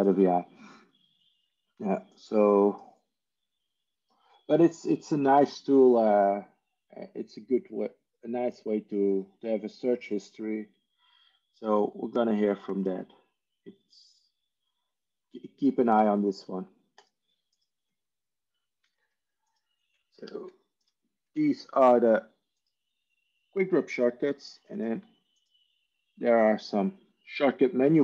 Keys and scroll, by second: 20.2 alt+F4, 25.8 ctrl+e.